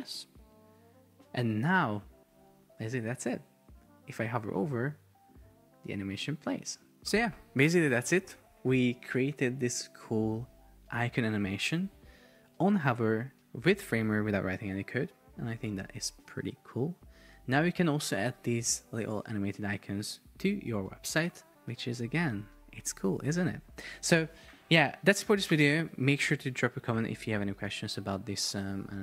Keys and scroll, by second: 3.0 super+p.